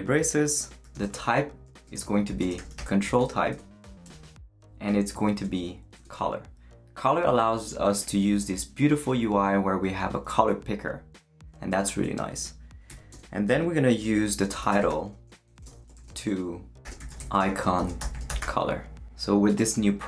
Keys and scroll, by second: 0.7-4.0 typing, 5.2-6.1 typing, 14.3-18.9 typing.